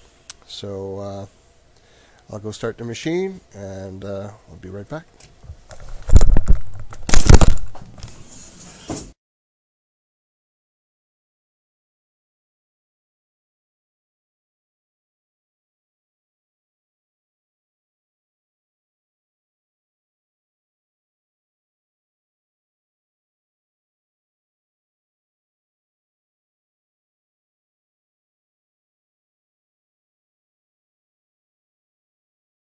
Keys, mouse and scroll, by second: 0.2-2.2 scroll down 1, 3.2-5.5 drag.